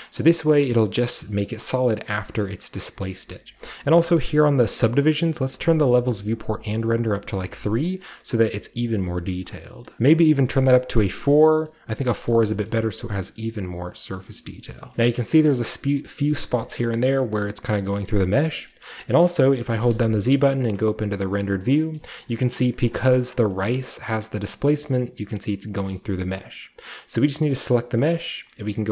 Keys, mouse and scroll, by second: 1.3 shift+scroll down 1, 1.4-2.0 shift+scroll up 1, 2.0 shift+scroll down 1, 3.1-5.2 middle drag, 3.1-5.2 scroll up 1, 6.3 click, 7.2-8.0 scroll down 1, 7.3-8.8 middle drag, 8.0-9.4 scroll up 1, 9.4 middle drag, 9.4-10.9 scroll down 3, 9.9-10.9 middle drag, 10.9-12.3 drag, 12.3-13.2 scroll up 2, 12.7-13.2 middle drag, 13.2-14.4 scroll up 1, 13.4 shift+middle drag, 14.2 shift+middle click, 14.4 shift+middle drag, 14.7 shift+middle drag, 14.9-15.9 shift+scroll down 2, 15.2-15.9 shift+middle drag, 16.1 middle drag, 16.3 shift+middle click, 16.6-17.2 middle drag, 17.4-17.9 middle drag, 17.8-19.9 scroll down 3, 18.1 shift+middle drag, 18.4 shift+middle drag, 18.7 shift+middle drag, 19.1-20.5 shift+middle drag, 19.9-20.5 shift+scroll down 1, 20.5 z, 22.0 middle drag, 22.2-23.3 shift+scroll up 1, 22.3-23.3 shift+middle drag, 23.3-24.2 scroll down 1, 23.7-24.7 middle drag, 24.2-24.7 scroll down 1, 24.9-25.8 shift+middle drag, 25.9-28.9 middle drag, 28.0-28.7 scroll up 1, 28.0-28.7 typing, 28.7-28.9 scroll up 1.